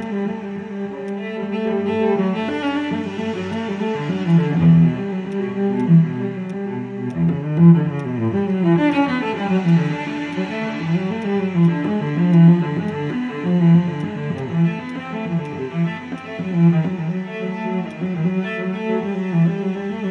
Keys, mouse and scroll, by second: 0.0 alt+click, 1.1 alt+click, 8.0 alt+click, 11.6 alt+click, 15.8 alt+middle click, 16.2 alt+click, 18.5 scroll down 1, 19.6 scroll up 1.